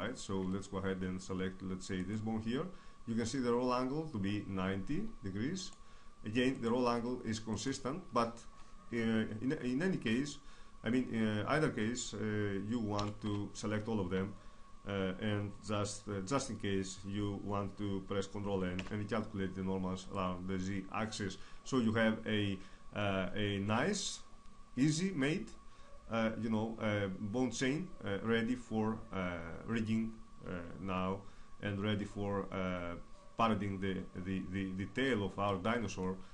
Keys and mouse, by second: 0.5 Tab, 2.0 right click, 10.5-12.1 middle drag, 13.0 a, 13.3 a, 18.8 ctrl+n, 35.5-36.3 middle drag.